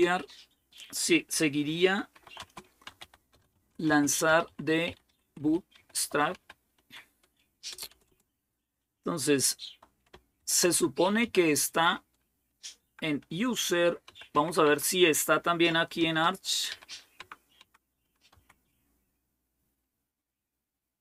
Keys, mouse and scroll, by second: 1.7-8.4 typing, 10.2-14.6 typing, 15.8-18.1 typing.